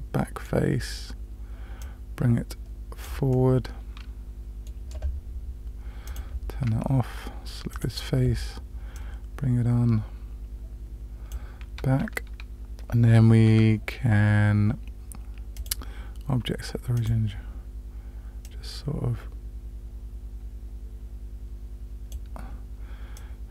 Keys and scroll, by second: 13.5 Tab.